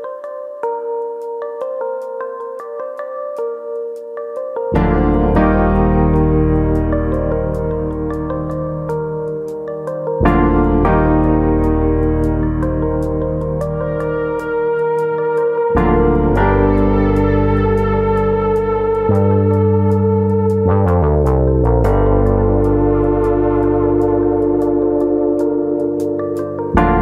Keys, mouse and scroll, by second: 0.6 click, 1.0 e, 4.5 click, 4.7 scroll up 3, 5.0 shift+middle click, 5.4-6.3 scroll up 1, 6.3 e, 7.0 right click, 7.2 ctrl+z, 8.8 click, 9.8 3, 9.9 click, 10.6 click, 13.4 2, 14.5 click, 15.1 click, 16.7 click, 18.1 click, 20.6 middle click, 21.3 middle click, 22.2 click, 22.4 middle click, 22.9 click, 23.8 click, 24.1 middle click, 24.6 click, 25.5 click, 26.3 click, 26.5 middle click.